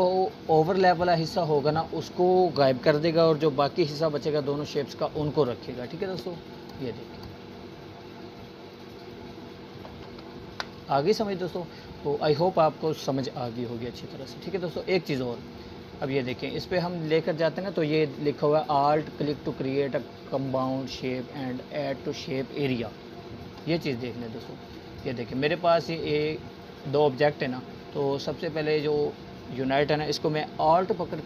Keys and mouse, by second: 0.2 ctrl+z, 1.2-2.5 drag, 7.4-10.1 drag, 10.8 ctrl+z, 12.2-14.0 drag, 24.9-26.4 drag.